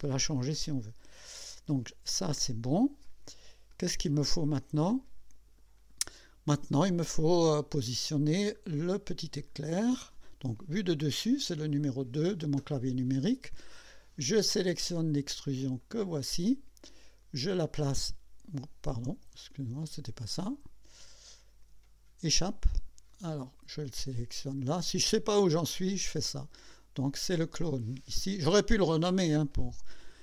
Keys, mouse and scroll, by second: 0.6 scroll up 1, 3.0 click, 3.7-5.7 drag, 5.8-6.2 scroll down 1, 6.7-8.1 drag, 8.2 scroll down 2, 8.6-9.3 scroll up 6, 9.6 scroll down 2, 10.5 2, 15.8 click, 17.6-18.7 drag, 19.5 ctrl+z, 22.3 Escape, 25.1 click.